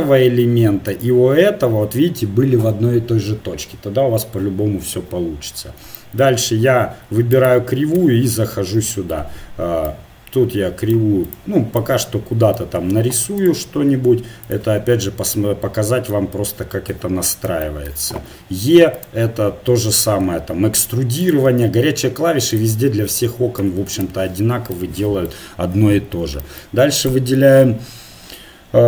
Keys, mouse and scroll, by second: 4.9 KP_7, 5.8-6.3 scroll down 1, 7.3 right click, 7.9 Tab, 9.8-11.2 right drag, 13.7 r, 16.9 KP_7, 18.3 e, 20.3 r, 21.4 s, 23.2 click, 24.4 click, 26.0 Tab, 27.0-28.8 right drag.